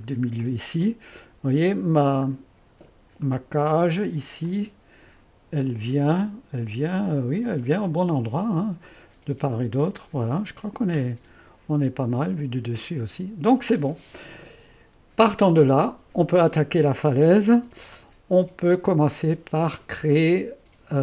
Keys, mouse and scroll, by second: 0.4-2.3 drag, 2.3-2.9 scroll up 1, 3.4-6.3 middle drag, 6.3-7.8 drag, 7.8-8.9 scroll down 2, 8.9-10.4 drag, 11.1-13.3 middle drag, 13.3-16.6 drag, 17.9 1.